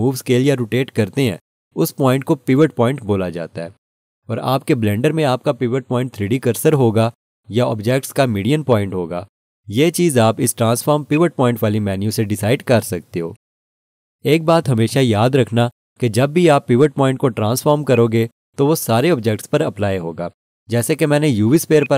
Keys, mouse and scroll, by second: 11.1 click, 17.9 click, 21.8 click.